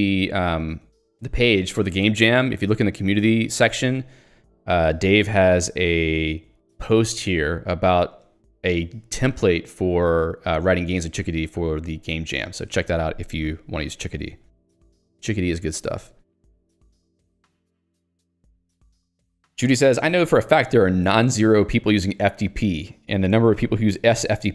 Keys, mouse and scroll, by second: 15.8 alt+Return.